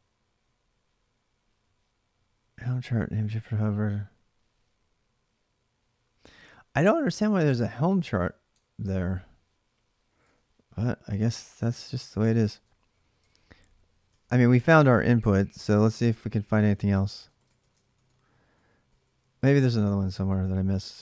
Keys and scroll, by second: 6.6 ctrl+[, 6.8-8.5 typing, 8.0 ctrl+[, 8.1 ctrl+j, 9.6-10.4 typing, 11.9-21.0 typing, 13.9 ctrl+[, 15.0 ctrl+[, 15.9 Return, 16.1 ctrl+[.